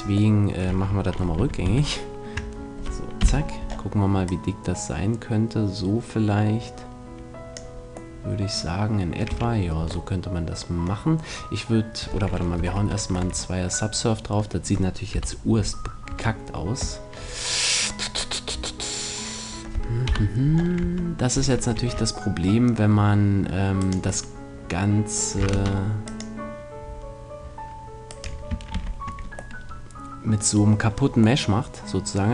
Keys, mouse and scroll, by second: 1.1 ctrl+z, 1.4 ctrl+z, 1.6 ctrl+z, 3.2 KP_3, 4.3-5.5 drag, 5.5 middle click, 5.9 click, 8.1 middle click, 9.3 a, 9.8 Tab, 12.6 ctrl+2, 13.1 Tab, 15.1 KP_1, 16.1 Tab, 20.1 KP_1, 20.8 Tab, 21.7 ctrl+r, 23.9-25.5 middle drag, 25.5 ctrl+r, 28.2-29.5 right drag, 28.9 ctrl+z, 29.5 middle click, 29.9-32.3 middle drag.